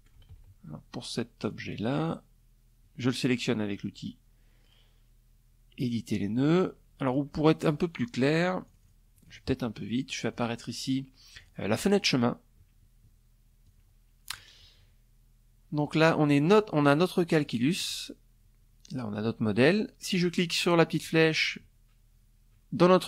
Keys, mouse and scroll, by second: 0.0 click, 0.6 click, 5.6 click, 7.2 click, 7.8 click, 8.9 click, 9.9 click, 10.5 middle click, 12.2 click, 14.4 click, 15.9 click, 16.3 click, 19.5 click, 22.3 click.